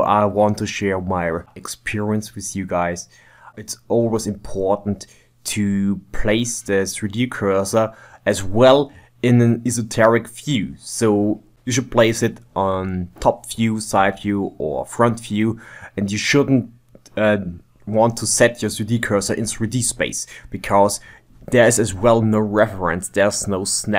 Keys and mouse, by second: 0.0 n, 0.2 ctrl+middle click, 0.4 click, 0.5 click, 0.6 click, 0.8 click, 1.2 ctrl+middle click, 1.4 middle click, 1.7 shift+middle click, 2.2 ctrl+Tab, 2.6 click, 2.8 KP_1, 3.0 g, 3.2 shift+d, 4.0 g, 4.2 ctrl+Tab, 4.4 ctrl+middle click, 5.0 ctrl+z, 5.2 ctrl+middle click, 5.4 KP_1, 5.6 shift+right click, 5.8 f, 6.2 click, 6.4 middle click, 6.9 shift+right click, 7.3 middle click, 7.7 shift+right click, 7.9 middle click, 8.6 click, 9.1 KP_3, 9.5 middle click, 9.9 shift+middle click, 10.3 shift+click, 10.7-13.1 typing, 11.5 click, 12.1 middle click, 12.5 click, 13.5 middle click, 13.7 ctrl+Tab, 13.9 middle click, 15.3 ctrl+middle click, 15.5 shift+right click, 16.1 n, 16.3 click, 16.4 KP_1, 16.7 shift+right click, 17.6 shift+middle click, 18.2 click, 19.0 middle click, 19.3 g, 20.1-20.5 middle drag, 21.2 shift+middle click, 21.2 b, 21.4 g, 21.8 click, 22.0 click, 22.2 ctrl+z, 22.2 ctrl+shift+middle click, 22.8 s, 23.2 g, 23.4 ctrl+middle click, 23.8 ctrl+Tab.